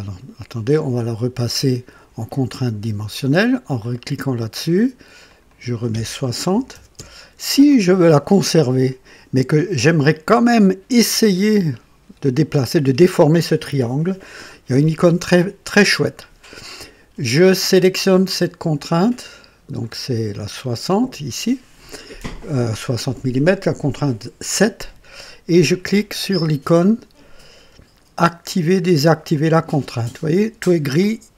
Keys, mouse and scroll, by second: 0.6 click, 3.8 click, 5.2 click, 6.5 KP_6, 6.7 KP_0, 6.9 Return, 10.3 middle click, 18.3 click, 19.8-21.2 drag, 29.3 click.